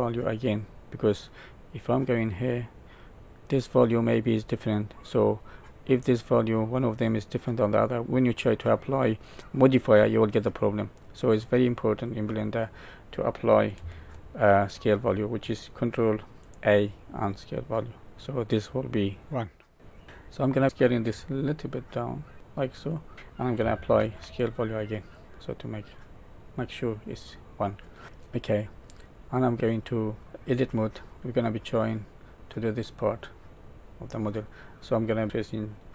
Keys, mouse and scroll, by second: 2.0 click, 8.4 click, 11.9 click, 12.5 click, 14.7 ctrl+a, 20.0 middle click, 20.4 middle click, 21.0 s, 23.1 middle click, 24.0 ctrl+a, 26.1 middle click, 28.8-29.5 scroll up 3, 29.5 middle click, 29.5-30.2 scroll down 2, 30.2-30.5 scroll down 1, 30.5 Tab, 31.8 click.